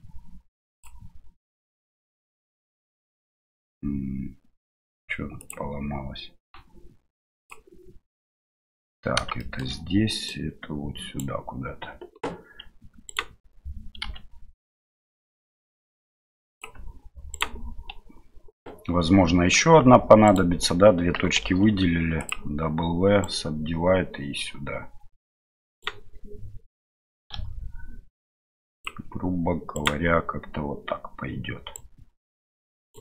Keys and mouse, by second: 0.8 v, 9.3 shift+click, 10.2 right click, 13.0 right click, 14.0 r, 17.3 right click, 21.4 w, 23.2-25.8 right drag, 27.3 s, 29.7 right click, 31.7-33.0 right drag.